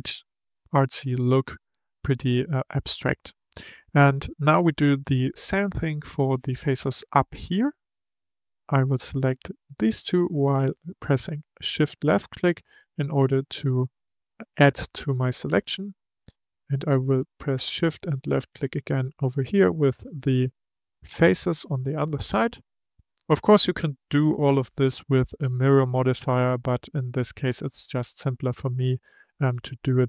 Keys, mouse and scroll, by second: 6.4-7.4 drag, 7.4 middle click, 8.3 click, 9.6 shift+click, 11.7-14.8 middle drag, 14.8-18.0 middle drag, 18.0 shift+click, 18.4 shift+click, 19.3-22.4 middle drag, 22.8 middle click, 23.5-26.6 scroll down 3, 28.5-30.0 middle drag.